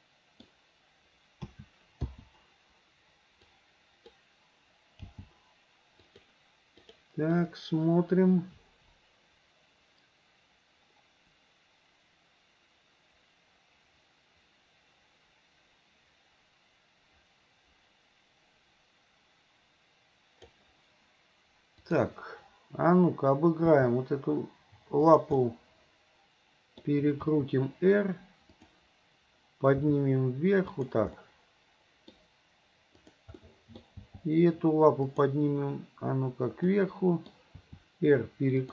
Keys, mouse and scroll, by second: 1.5 a, 2.1 i, 3.5 click, 5.2 g, 6.9 click, 7.4-20.6 drag, 21.8 click, 23.0 click, 23.7 g, 25.4-26.9 middle drag, 27.3 r, 29.9 g, 31.2 middle click, 33.0 click, 33.4 middle click, 34.0 g, 36.7-37.4 middle drag, 37.6 r.